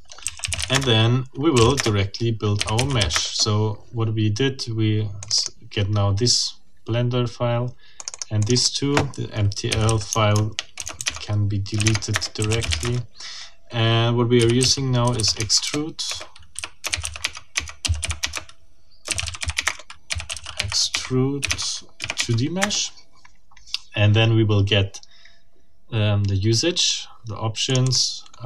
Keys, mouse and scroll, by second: 0.0-3.3 typing, 1.7 Return, 5.2 click, 8.0 click, 9.5-22.0 typing, 11.9 shift+Tab, 12.1 shift+Return, 21.5 Tab, 22.1 Tab, 22.6 Return, 27.7 click.